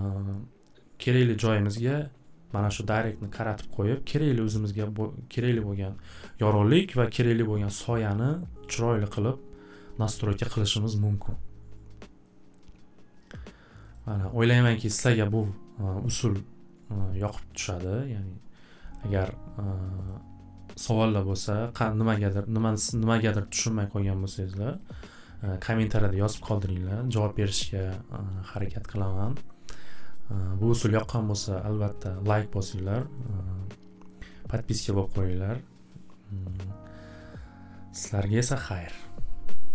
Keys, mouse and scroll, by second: 13.9 click, 20.1 click, 23.3 click, 24.4 click, 24.9 click, 30.1 click, 30.4 click, 33.0 click, 33.3 click.